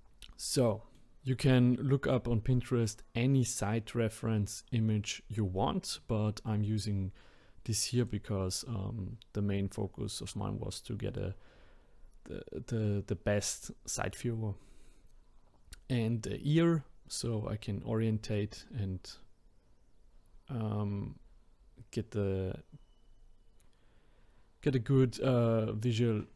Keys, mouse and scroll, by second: 0.1-0.7 scroll down 2, 0.7-1.2 middle drag, 1.2-3.3 scroll up 1, 6.5-8.0 middle drag, 8.0 click.